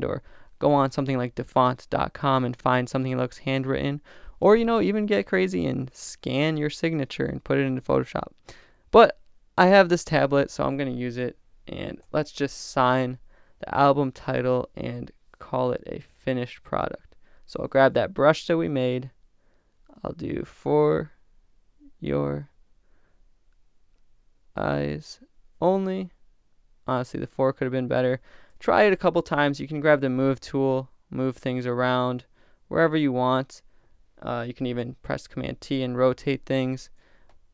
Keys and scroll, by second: 8.9 BackSpace, 11.8 shift+super+n, 12.9 shift+super+Return, 34.7 super+t.